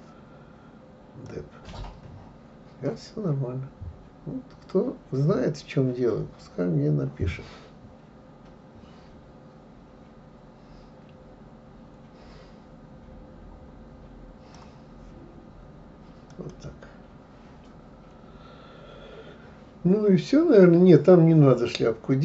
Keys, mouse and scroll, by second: 1.3-4.3 drag, 16.3 click, 18.7 scroll down 1.